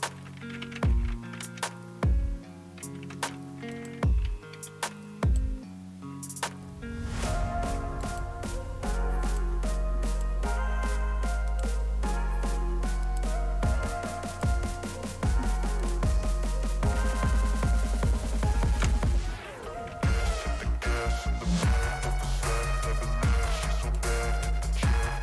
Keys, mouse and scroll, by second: 0.3-1.5 typing, 3.8-4.5 typing, 3.8 click, 5.2 click, 6.2-8.5 typing, 8.0 click, 9.2 click, 10.1 click, 11.5 click, 13.0 click, 14.3 click, 15.8 click, 20.9 click, 21.9 click, 23.8 click.